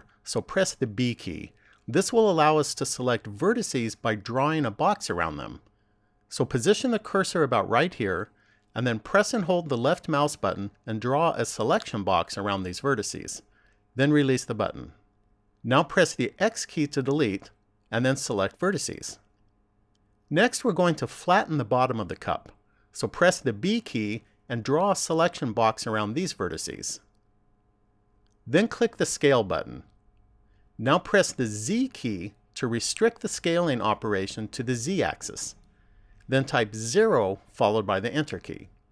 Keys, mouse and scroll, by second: 1.3 b, 17.1 x, 23.8 b, 30.8 click.